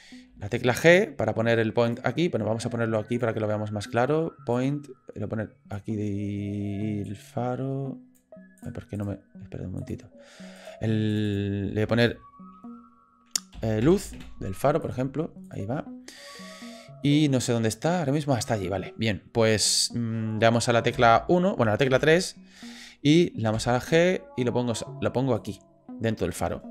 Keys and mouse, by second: 0.4 g, 4.5-5.7 drag, 7.0-8.1 drag, 11.3-14.9 drag, 15.4 click, 17.5-18.3 middle drag, 20.9 KP_1, 21.9 KP_3, 23.5 g.